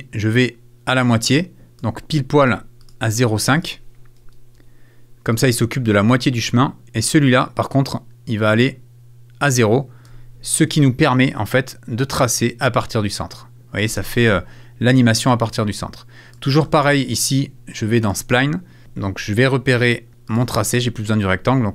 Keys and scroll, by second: 4.2 BackSpace, 13.9 space, 15.2 space.